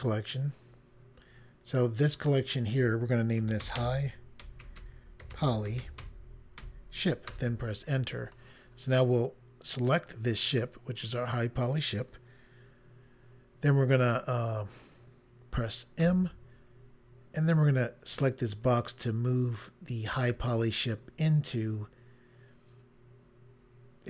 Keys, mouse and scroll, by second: 2.0 click, 2.2 click, 3.4-7.1 typing, 7.3 Return, 10.3 click, 16.0 m, 20.2 click.